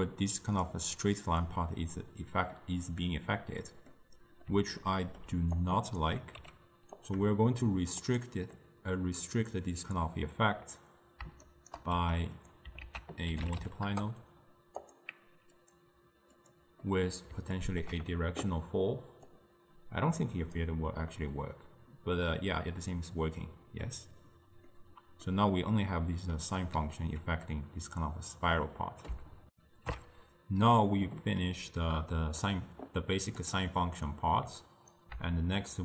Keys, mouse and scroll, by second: 0.7 d, 0.9 d, 3.9-5.7 middle drag, 5.7 click, 6.4 g, 8.1 click, 8.7-11.5 middle drag, 11.5 shift+right click, 12.0 g, 12.9 ctrl+a, 15.7-16.9 drag, 16.9 scroll up 1, 16.9-19.4 middle drag, 19.4-21.2 drag, 21.2-24.3 middle drag, 24.8-28.9 middle drag, 29.5 ctrl+alt+shift+w, 31.2-33.5 middle drag, 33.5-35.8 drag.